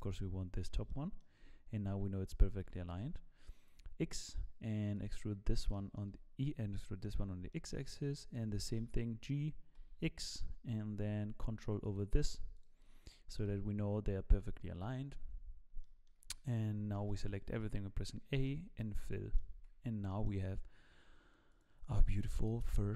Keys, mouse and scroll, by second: 0.9 shift+middle click, 2.6 e, 5.3-5.7 scroll down 3, 5.7 shift+middle click, 6.4-6.7 scroll up 2, 6.7 shift+middle click, 7.1 scroll down 1, 7.5 shift+middle click, 8.8 g, 12.5 shift+click, 13.5 f, 15.5 scroll down 1, 15.8 shift+middle click, 17.0 a, 18.3 f, 18.8-19.4 scroll down 2, 19.0 middle click, 19.5 Tab, 19.7-20.2 scroll down 2, 20.1 middle click.